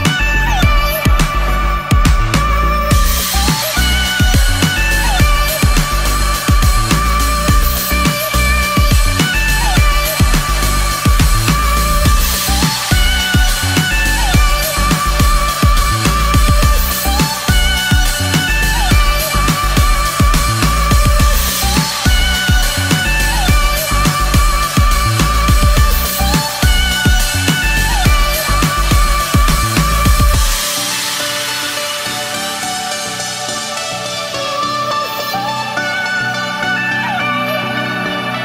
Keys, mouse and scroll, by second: 0.0-0.8 typing, 1.1-2.7 drag, 3.1 Delete, 3.8-5.1 drag, 7.2-8.5 typing, 9.0-12.9 drag, 12.9 KP_3, 13.5 Return, 14.9 click, 16.4 F10, 16.6 right click, 17.6-19.3 typing, 22.5-26.0 typing, 26.8 click, 30.1 F10, 30.9 click, 31.4-32.4 typing, 33.6 click, 34.3-35.5 typing, 36.2 click, 36.9-37.8 typing.